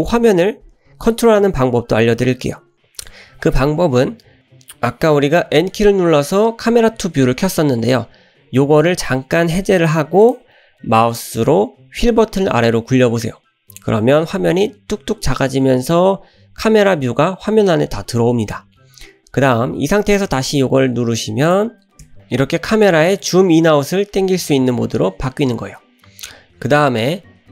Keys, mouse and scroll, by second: 5.4 n, 10.2 click, 13.2 scroll down 1, 14.7 scroll down 1, 21.5 click, 22.0 n, 22.2 scroll down 2, 23.7-24.3 scroll up 2, 25.0 scroll down 1.